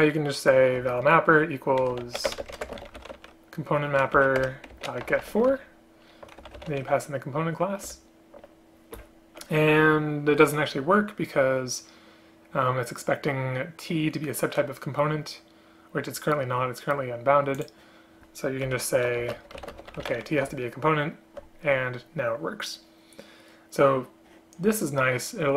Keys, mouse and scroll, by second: 0.9 space, 2.5 BackSpace, 2.7 space, 4.3 Down, 4.5 Return, 5.6 Return, 8.0 Return, 18.8 Left, 19.3 space, 20.6 Return.